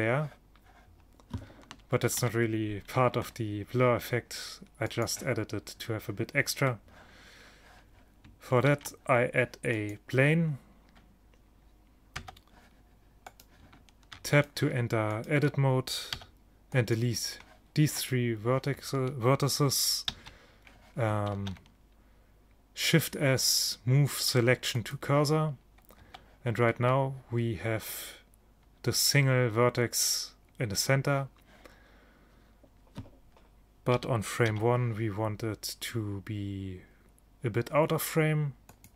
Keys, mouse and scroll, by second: 2.2 ctrl+shift+Down, 8.7 shift+a, 12.2 Tab, 13.4-17.0 drag, 16.2 x, 18.0-19.9 drag, 20.2 shift+a, 21.4 shift+s, 26.1 Tab, 34.0 g.